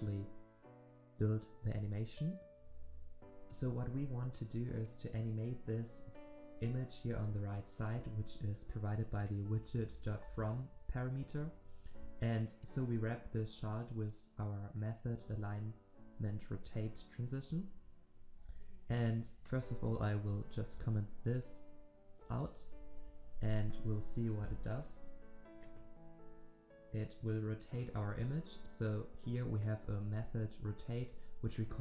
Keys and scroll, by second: 24.3 ctrl+s.